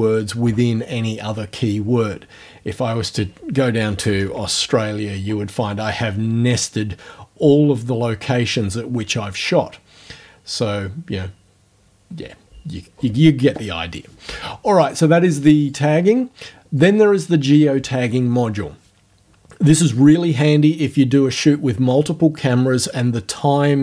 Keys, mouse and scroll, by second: 2.9 scroll up 1, 3.8-4.8 typing, 15.6 click, 16.8 click.